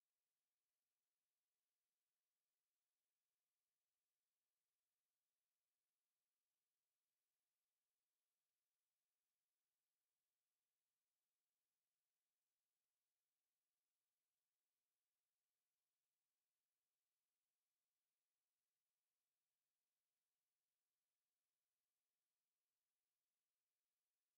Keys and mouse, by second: 0.3 b, 6.3 x, 9.3 right click, 10.8 f, 12.9 f, 14.1 KP_7, 17.7 b, 23.6 x.